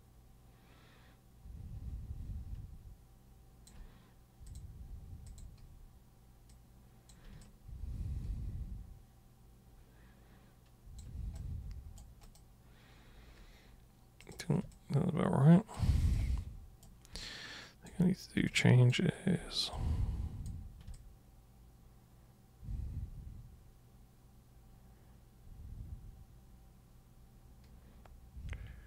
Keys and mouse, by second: 4.4 super+click, 5.2 super+click, 6.5 super+click, 7.4-10.9 alt+super+drag, 11.3 super+right click, 12.2 super+click, 14.2 super+click, 14.7-15.7 alt+super+drag, 16.1 super+right click, 17.2-17.9 alt+super+drag, 18.5-18.9 alt+super+drag, 19.7-20.4 super+drag, 20.9-28.8 alt+super+drag.